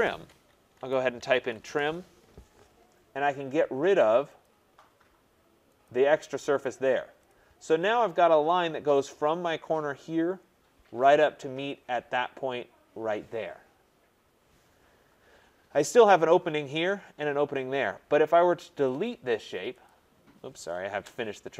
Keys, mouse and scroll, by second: 0.7-1.6 typing, 4.4 click, 5.8 click, 7.3 click, 7.8 scroll, 8.7-9.4 scroll, 10.0-10.5 scroll, 11.0-12.5 scroll, 14.4 scroll, 15.3-15.9 scroll, 19.0 click, 19.9 click, 20.9 Return.